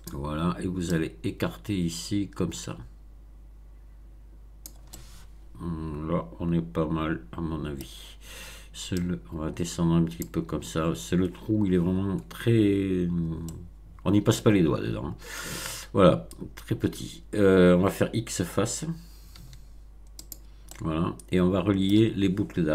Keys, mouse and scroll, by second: 0.9-4.8 drag, 4.9-7.9 middle drag, 8.9-10.4 drag, 13.4-15.5 middle drag, 19.3 x, 20.2 click, 20.6-22.0 middle drag.